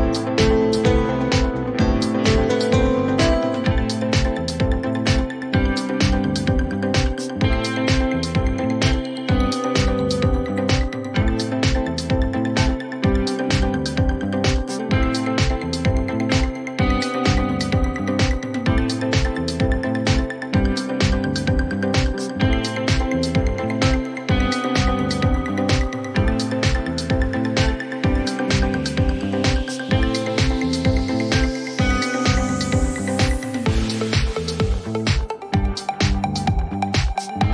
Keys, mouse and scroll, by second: 0.2 click, 1.7 click, 2.0-3.1 typing, 4.2 Return, 7.4 click, 8.8 click, 10.6 click, 11.6 click, 16.2 click, 19.8 click, 21.8 click, 24.1 click, 26.8 click, 27.8 click.